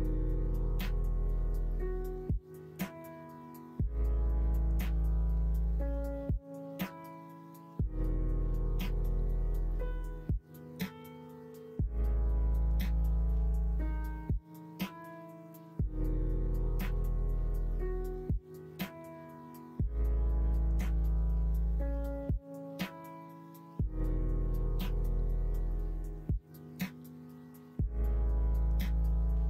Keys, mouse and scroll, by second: 5.8 middle click, 6.4 middle click, 6.7 Tab, 7.0 middle click, 12.6 middle click, 13.0 ctrl+r, 14.9 ctrl+b, 24.9 ctrl+b, 28.5 middle click.